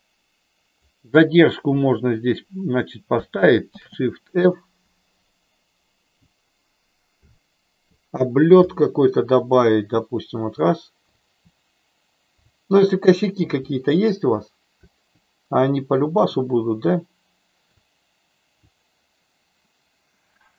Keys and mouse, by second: 3.6 shift+f, 5.4-5.8 Up, 6.1 Up, 7.2 Down, 8.6 Left, 9.0 Left, 12.4 Up, 13.0 Up, 13.4 Down, 14.8 Up, 15.9 Down, 17.8-18.5 Up.